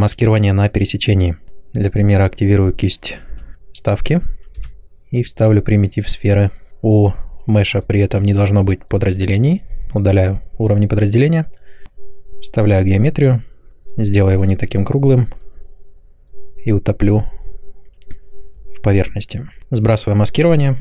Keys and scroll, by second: 3.2 i, 4.5 m.